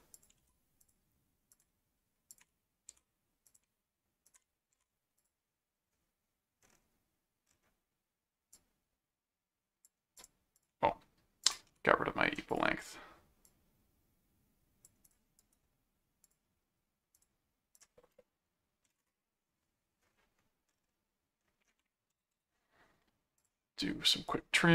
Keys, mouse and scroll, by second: 0.1 alt+click, 0.4 alt+c, 0.8 click, 1.5 ctrl+click, 2.3 ctrl+alt+click, 2.9 alt+d, 3.4 ctrl+click, 4.2 ctrl+alt+click, 4.7 ctrl+alt+d, 5.2 click, 8.5 click, 10.2 click, 11.4 ctrl+alt+click, 11.7 ctrl+alt+q, 12.5 click, 13.4 click, 15.0 click, 15.4 right click, 16.2 click, 17.1 click, 21.7 scroll down 2, 23.4 click, 24.1 click.